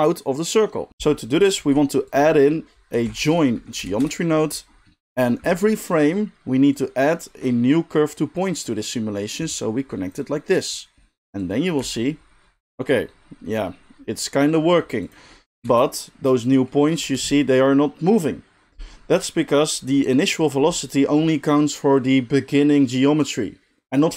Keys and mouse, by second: 1.6 shift+a, 5.3 middle click, 5.6-24.1 drag, 11.8 space, 15.5 space, 15.7 space, 17.0 space.